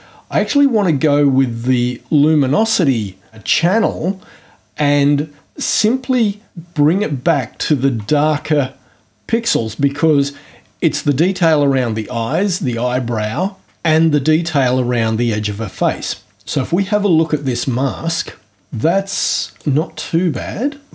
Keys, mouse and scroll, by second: 5.6-7.9 drag, 17.3 click, 19.6-20.5 drag.